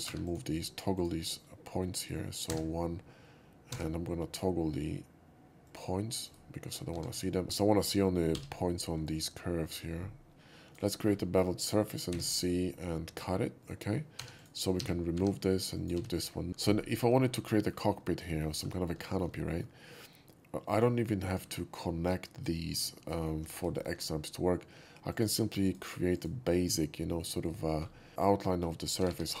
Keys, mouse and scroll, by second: 0.0 3, 0.2 click, 0.9 click, 2.5 1, 3.7 f, 5.7 click, 6.2 right click, 7.0 1, 7.2 drag, 8.4 b, 9.0-10.7 drag, 9.0 b, 10.8 right click, 11.1 scroll down 1, 11.4 middle drag, 12.2 c, 12.3 click, 12.8 c, 14.2 4, 14.4 click, 14.8 x, 15.2 2, 15.7 click, 15.9 x, 16.2 middle click, 16.9 shift+middle click, 17.2-17.7 shift+middle drag, 18.3 alt+middle click, 18.6 alt+middle click, 19.0 shift+middle click, 19.3 shift+middle click, 20.7 shift+click, 21.1 shift+middle click, 22.8 alt+middle click, 23.1 alt+middle drag, 23.4 scroll up 1, 23.7 shift+middle drag, 25.1 shift+click, 25.6 shift+click, 26.1 shift+click, 27.2 click, 27.4 right click, 27.8 middle click, 29.0 g, 29.1 g.